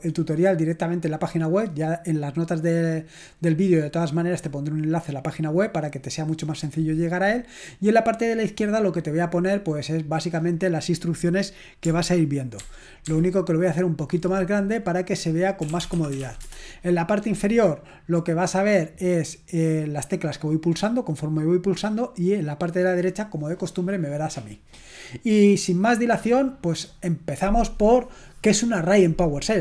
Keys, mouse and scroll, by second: 7.7-12.6 drag, 12.6 ctrl+alt++, 13.1 ctrl+alt++, 16.1-16.4 typing, 24.4-25.5 scroll down 1.